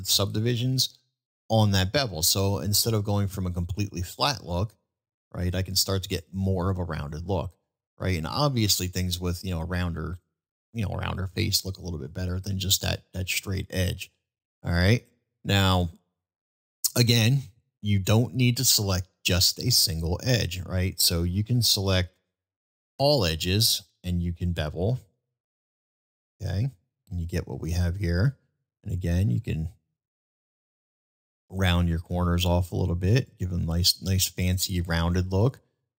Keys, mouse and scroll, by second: 15.5-16.6 middle drag, 16.9-17.3 middle drag, 17.9-18.4 middle drag, 19.6-20.1 middle drag, 25.4 ctrl+b, 33.7 middle drag.